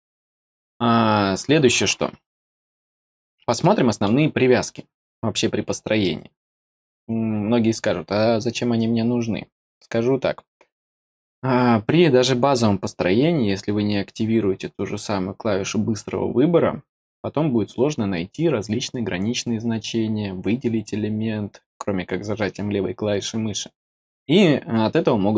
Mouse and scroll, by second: 3.5 middle click.